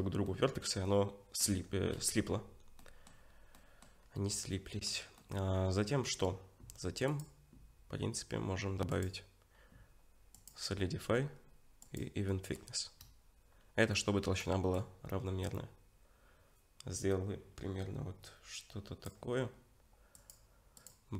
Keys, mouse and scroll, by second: 0.3 middle click, 1.5 Tab, 2.8 middle click, 3.3 scroll up 2, 3.6 middle click, 4.0-4.8 scroll down 3, 4.3 middle click, 7.1 click, 12.3 middle click, 14.7 shift+click, 20.2 click.